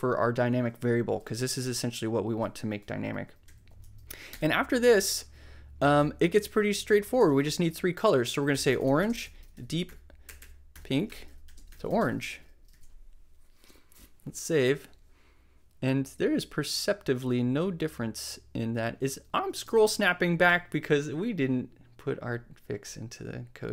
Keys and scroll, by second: 3.4 ,, 4.2 shift+,, 4.3 shift+Return, 6.7 super+z, 7.2 super+space, 8.0-12.6 typing, 12.6 super+e, 12.7 super+s.